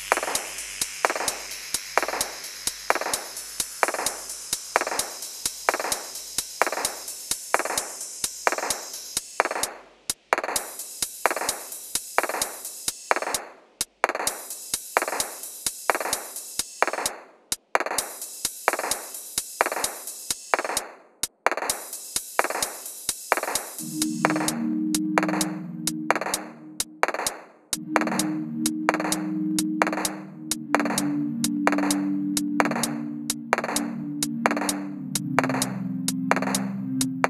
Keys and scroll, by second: 3.4-4.6 typing, 4.8 Return, 7.1 ctrl+c, 7.1 ctrl+c, 7.6 ctrl+v, 8.0-11.7 typing, 13.2 Return, 14.3 ctrl+c, 14.4 ctrl+c, 14.8 7, 14.9 ., 15.4 Tab, 16.7 ctrl+v, 17.0 ctrl+v, 17.2 ctrl+v, 18.7 Tab, 19.1-19.8 typing, 21.1 typing, 23.1 typing, 24.3 typing, 26.8 i, 27.0 ctrl+r, 29.8 7, 32.7 7, 33.9-34.4 typing, 35.8 alt+h, 36.2 g, 37.0 ctrl+r.